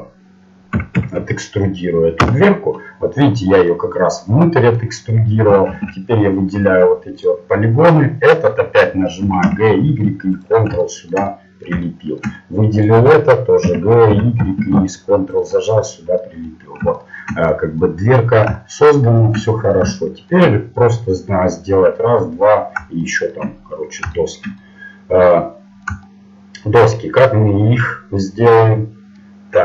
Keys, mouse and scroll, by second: 3.0 middle click, 6.8 ctrl+Tab, 7.2-8.2 right drag, 9.2 g, 10.8-12.7 middle drag, 12.7-15.6 right drag, 13.6 g, 14.7 click, 15.6 middle click, 18.1-20.5 middle drag, 23.6-29.3 middle drag.